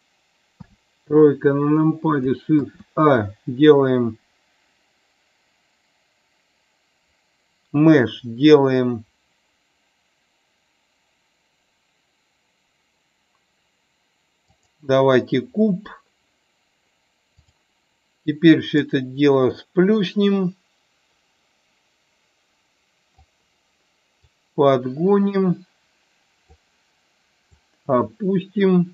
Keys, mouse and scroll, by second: 0.0 Delete, 0.5 KP_3, 2.5 shift+a, 18.6-23.1 drag, 24.3-26.5 drag, 27.5-28.9 drag.